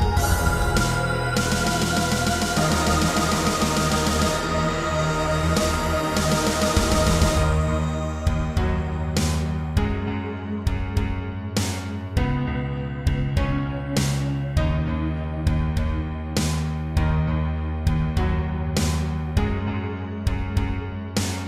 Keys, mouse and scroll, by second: 0.1 Tab, 1.9 scroll down 2, 2.2 middle click, 4.0 shift+middle click, 4.8 click, 5.8 ctrl+Tab, 8.3 click, 11.2 click, 11.6-13.5 typing, 14.2 click, 14.9 middle click, 16.6 click, 17.4 middle click, 17.9 scroll up 3, 18.5 shift+middle click, 19.1 middle click, 20.6 scroll down 3.